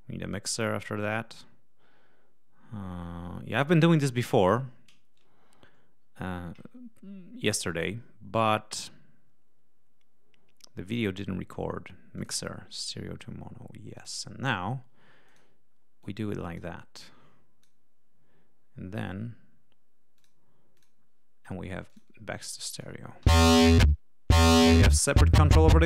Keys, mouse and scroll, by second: 0.9-1.6 scroll down 2, 12.1 click, 13.9 click, 15.2 click, 15.9 click, 16.9 click, 20.1 click, 20.7 click, 21.8 click, 23.1 l, 24.6-25.8 drag.